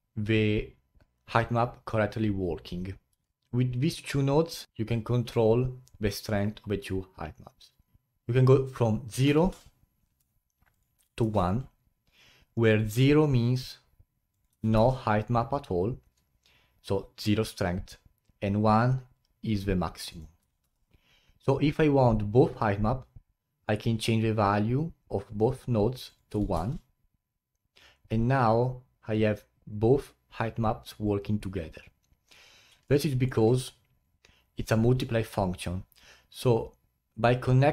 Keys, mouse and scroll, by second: 3.2-9.5 alt+middle drag, 9.5-13.8 drag, 14.3-19.2 drag, 20.1-25.1 drag, 26.0-29.1 drag, 32.8-33.8 middle drag, 33.8-34.4 scroll up 1.